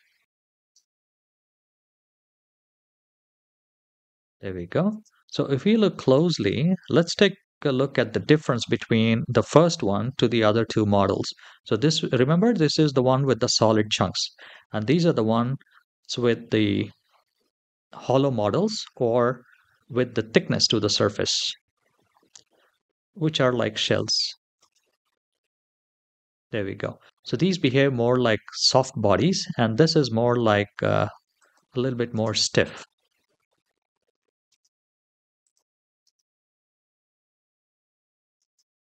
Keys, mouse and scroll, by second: 0.2 click, 0.2 shift+middle click, 0.2 scroll down 2, 0.4 space, 4.8 space, 5.2-6.4 scroll up 2, 6.8-8.1 middle drag, 23.6 click, 24.4 space, 26.9 space, 31.2 click, 32.0 space, 34.3 space, 35.2 click, 35.8 space, 38.2 space.